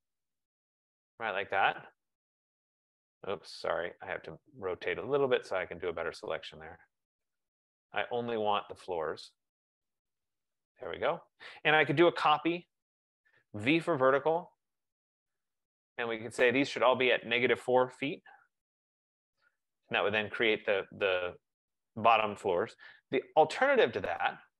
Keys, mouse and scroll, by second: 0.9 click, 2.9 click, 5.0 right click, 10.1 click, 12.0-13.9 typing, 14.0 Return, 17.0 click, 18.0-19.0 typing, 23.6 Escape, 24.1 Escape.